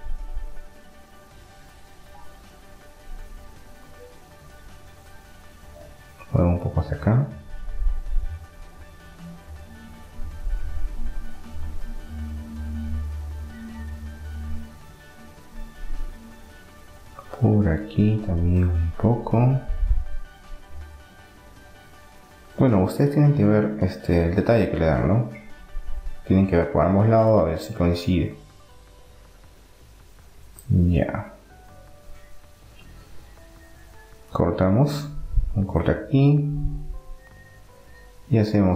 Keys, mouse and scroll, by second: 3.6-4.9 middle drag, 4.9-6.4 right drag, 7.0 click, 8.6-10.6 middle drag, 11.6-13.4 middle drag, 14.6 click, 15.5 right click, 16.2-17.4 middle drag, 17.9 right click, 18.4-20.6 middle drag, 20.6 click, 20.9-25.9 middle drag, 27.3-28.4 middle drag, 29.2 middle click, 32.9 ctrl+r, 33.3-34.9 middle drag.